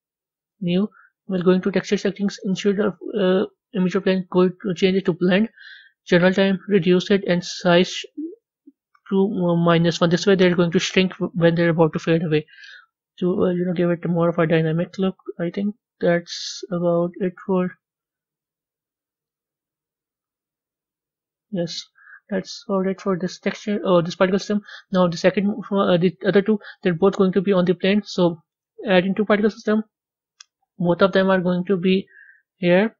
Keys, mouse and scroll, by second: 4.0-6.5 drag, 8.3-16.7 drag, 16.7-17.5 scroll up 10, 18.3-21.4 drag, 22.7-23.9 drag, 23.9 a, 24.7 click, 28.4-29.7 drag, 30.7 click, 31.4 click, 32.4 click.